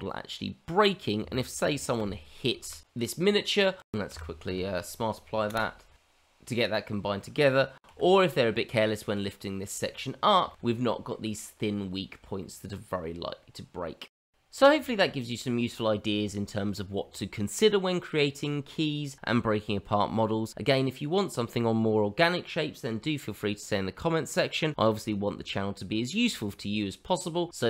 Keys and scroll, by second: 0.9 f, 3.9 g, 4.0 q, 4.4 q, 7.5 g.